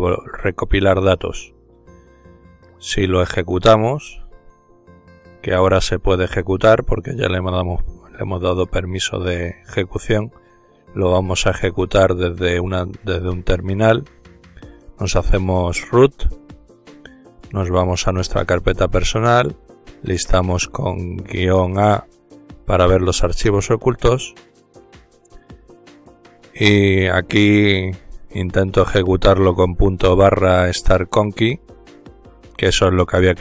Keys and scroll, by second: 8.9 ctrl+alt+t, 12.9-14.5 typing, 15.8-16.6 typing, 18.4-21.3 typing, 25.3 typing, 30.3 typing, 31.7 typing.